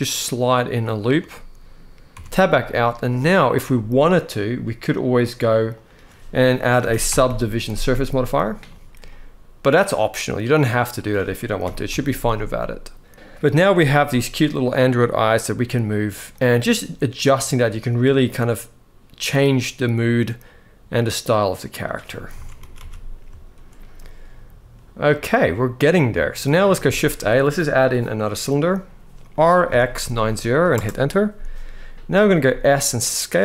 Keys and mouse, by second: 0.7 click, 1.0 middle click, 1.9 Tab, 2.4-3.1 middle drag, 5.0-8.2 drag, 8.8-10.8 middle drag, 11.3 KP_1, 13.8 g, 22.1 alt+a, 22.4 ctrl+s, 22.5 ctrl+s, 23.2 shift+middle drag, 26.5 shift+a, 29.1 r, 29.4 x, 29.7 9, 29.8 0, 30.5 Return, 32.2 s.